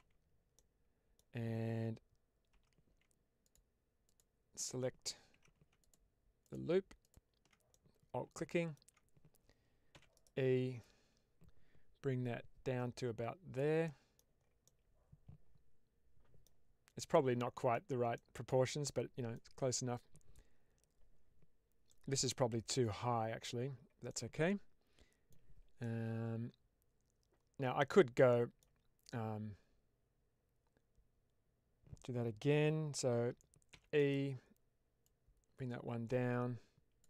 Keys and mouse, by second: 0.4 middle click, 2.4 3, 3.4 alt+click, 3.9 alt+click, 5.6 alt+2, 5.7 alt+click, 6.4 alt+click, 6.9 alt+click, 7.6-8.7 middle drag, 9.8 e, 10.0 right click, 10.7-13.4 drag, 13.7 middle click, 14.5-16.4 middle drag, 17.0 middle click, 18.0-19.2 middle drag, 21.8 middle click, 24.0-25.2 middle drag, 25.7-27.7 middle drag, 28.2 middle click, 33.9 right click, 34.9-36.9 drag.